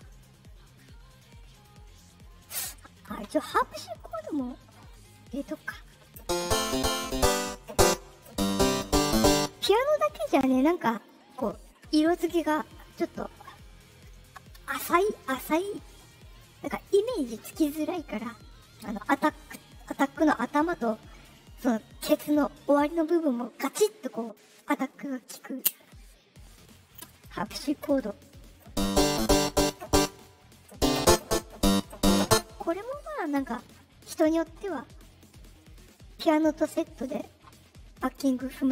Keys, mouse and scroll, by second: 2.3 click, 3.9 click, 33.6 middle click, 33.6 scroll up 2, 35.0 middle click, 35.0 scroll up 2, 35.5 middle click, 36.3 click, 37.0 click.